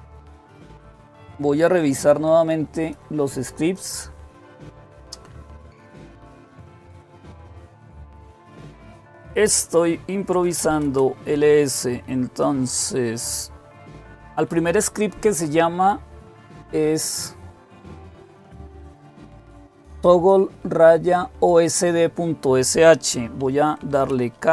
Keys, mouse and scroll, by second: 0.0 click, 2.5-4.3 drag, 10.0-10.9 typing, 19.6-22.3 drag, 23.7-24.5 typing.